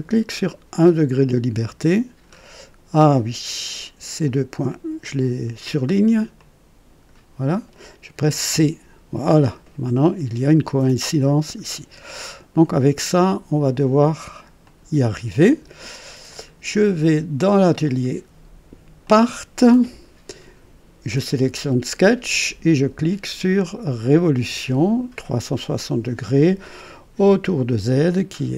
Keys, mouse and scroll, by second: 0.4 click, 2.2-2.5 scroll up 2, 4.6 click, 6.4 click, 8.5-9.3 typing, 9.3-9.6 scroll down 1, 11.6-11.9 scroll down 1, 12.2-13.5 right drag, 14.4-16.8 typing, 14.6 click, 16.3 click, 17.8 click, 19.0 click, 19.0 typing, 24.0 click.